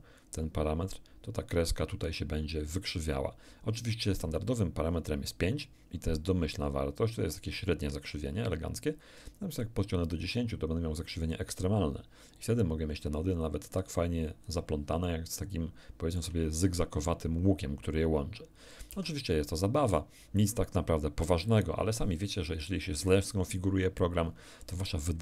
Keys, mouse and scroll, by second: 9.2-11.5 drag, 12.4-14.6 drag, 15.0-16.4 shift+middle drag, 19.1 alt+Tab.